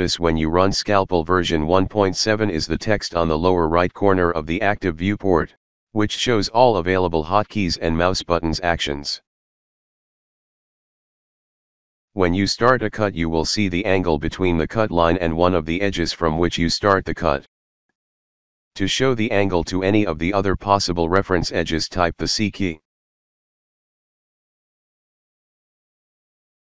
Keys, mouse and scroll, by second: 0.9 click, 11.7 shift+click, 19.6-21.6 alt+middle drag, 23.5-24.7 alt+middle drag.